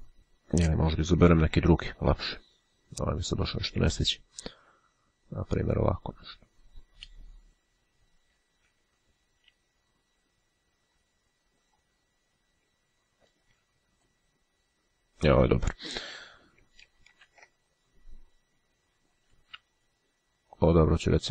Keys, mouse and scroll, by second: 1.5 ctrl+z, 3.8 click, 7.5 [, 9.5 ], 11.2-12.3 drag, 13.4 [, 14.1 click, 17.1 ctrl+z, 19.1 ].